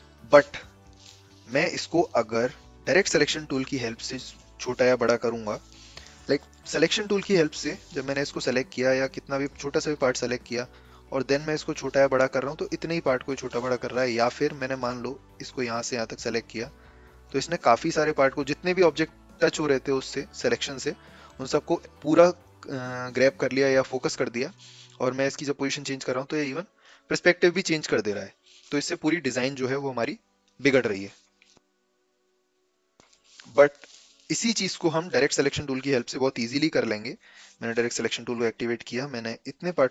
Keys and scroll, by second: 0.9 ctrl+z, 7.7 v, 13.7 v, 14.0 ctrl+z, 34.0 ctrl+z, 36.3 a, 37.5 a.